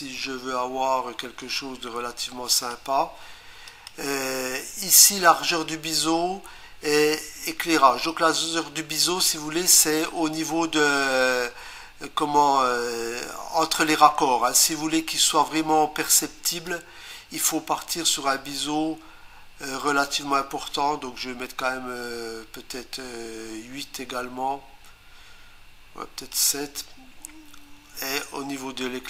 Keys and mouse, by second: 0.2 8, 2.5 click, 3.7 click, 8.1 click, 16.7 click, 28.2 click.